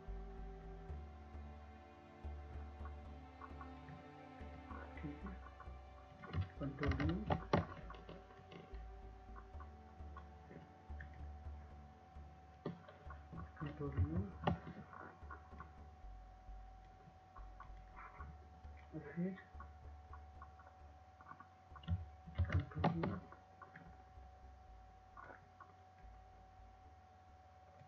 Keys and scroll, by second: 2.8 ctrl+u, 11.9 ctrl+u, 19.1 ctrl+u, 27.6 ctrl+u.